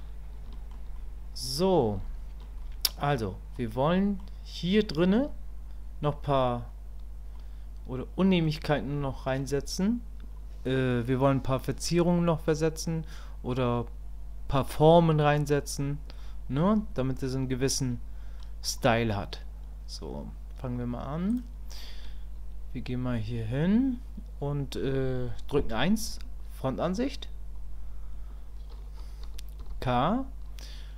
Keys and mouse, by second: 0.5 shift+click, 1.0 click, 2.0 shift+click, 2.6 click, 3.9 click, 7.3-8.4 middle drag, 9.1 shift+middle click, 12.1 click, 16.2-18.4 drag, 21.3 click, 26.1 KP_1.